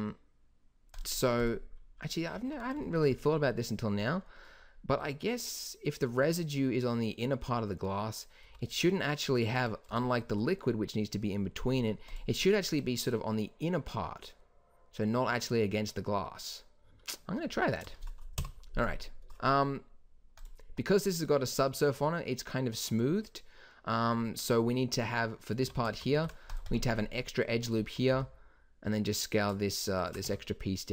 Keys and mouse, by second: 2.3 z, 5.0 z, 8.4 z, 11.8 click, 11.9 right click, 12.0-14.6 drag, 17.2-18.3 middle drag, 18.3 KP_1, 20.7 Tab, 21.9 Tab, 25.6 Tab, 26.1 ctrl+r, 28.0 s, 30.2 Tab.